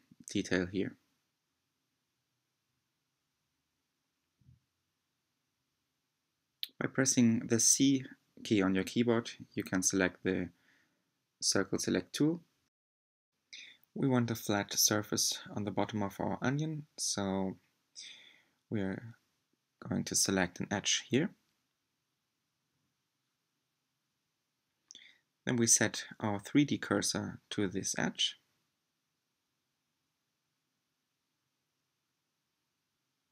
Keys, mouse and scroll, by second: 0.3 3, 2.0 c, 3.2 click, 4.5 c, 14.2 click, 17.1-18.0 scroll up 3, 18.1-19.6 shift+middle drag, 19.6 2, 20.8 click, 23.6 shift+s, 26.7-29.5 middle drag, 29.5 3, 31.3 c.